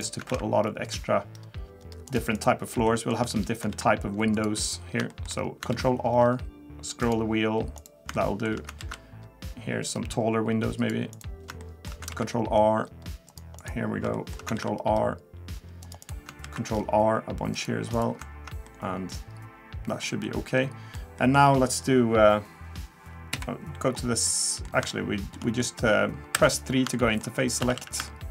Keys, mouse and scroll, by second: 0.3 ctrl+r, 2.9 shift+middle click, 3.2 shift+scroll up 1, 3.7 ctrl+r, 5.1 shift+middle click, 5.4 scroll up 2, 5.7 ctrl+r, 8.1 shift+middle click, 8.8 ctrl+r, 11.6 shift+middle click, 12.1 ctrl+r, 14.1 shift+middle click, 14.5 ctrl+r, 16.4 ctrl+r, 18.7 middle click, 20.2 middle click, 21.2 middle click, 23.3 KP_3, 24.3 middle click, 24.9 shift+middle click, 25.6 middle click, 26.3 3, 26.9 shift+middle click, 27.6 a, 27.8 a, 28.1 shift+middle click.